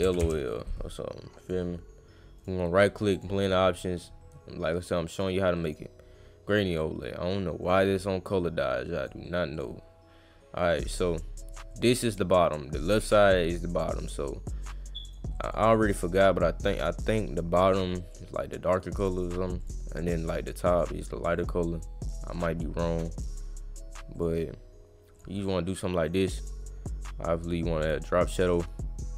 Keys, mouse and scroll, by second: 1.4 click, 2.4 right click, 3.1 click, 5.7 click, 6.5 click, 7.6 click, 8.3-9.1 drag, 9.6 click, 10.7 click, 11.7 click, 14.6 click, 15.3 click, 16.0-17.8 drag, 18.1-19.2 drag, 19.6 click, 20.7 click, 21.3 click, 22.3 click, 24.2 click, 25.2 click, 26.1 click, 26.4 click, 27.5 click.